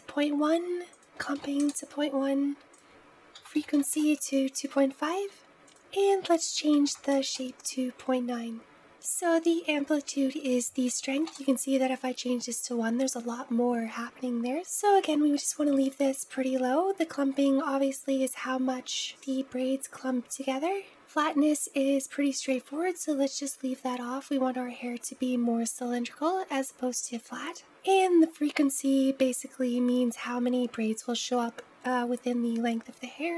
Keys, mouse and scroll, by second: 8.6 click, 10.3-13.3 drag, 15.0-19.0 drag, 19.0-20.6 scroll down 1, 27.6-28.8 scroll down 1, 28.8-31.8 scroll down 4.